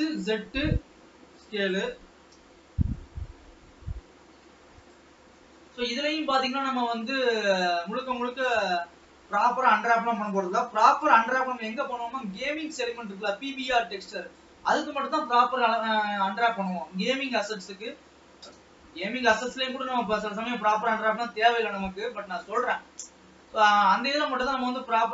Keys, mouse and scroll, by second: 2.1 g, 5.3-6.0 scroll up 3, 6.0-7.1 middle drag, 7.1 s, 11.0 g, 14.9 e, 17.1-17.4 scroll down 3, 17.9 ctrl+s, 18.6 KP_0, 19.9 alt+a, 20.3 scroll up 2, 20.9 ctrl+s, 21.9 shift+middle click, 22.6 scroll down 2, 22.9-24.3 middle drag, 24.3-24.7 scroll up 1, 24.7 click.